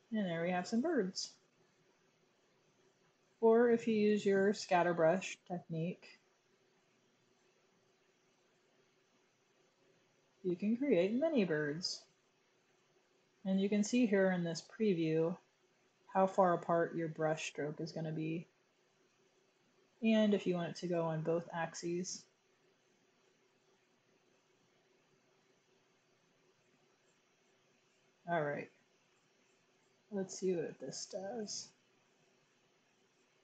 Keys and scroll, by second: 3.2 super+z.